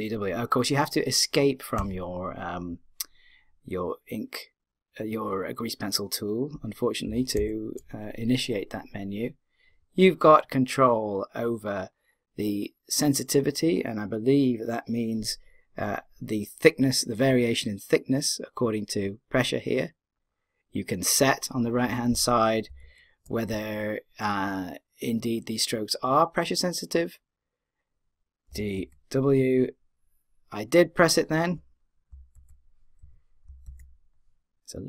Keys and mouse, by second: 7.1 d, 7.4 w, 22.7 d, 22.8 w, 28.5 d, 28.7 w, 33.4 d, 33.6 w.